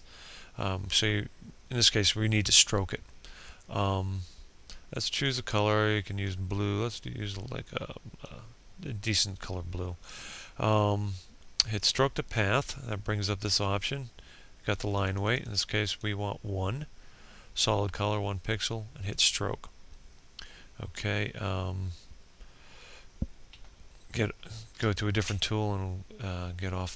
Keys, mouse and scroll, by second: 23.2 p.